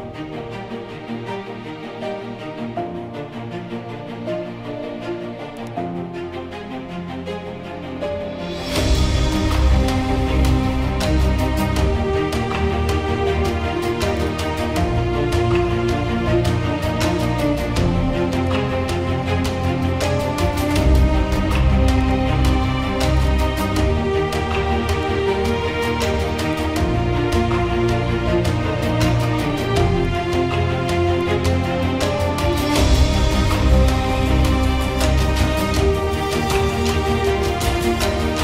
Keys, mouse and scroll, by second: 3.2 1, 5.7-8.9 drag.